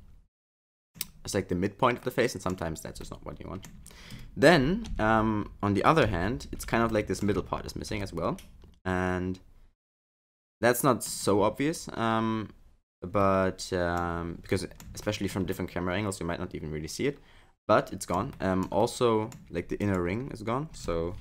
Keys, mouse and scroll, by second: 2.0 middle click, 2.7-3.0 scroll down 3, 3.0 middle click, 4.9 KP_1, 6.0 KP_3, 6.9 shift+middle click, 7.3-7.6 scroll up 7, 8.0 shift+middle click, 13.2 middle click, 14.1-14.5 scroll down 5, 14.5 middle click, 15.0 shift+middle click, 15.6 middle click, 18.4 shift+middle click, 18.8 middle click, 19.8 click.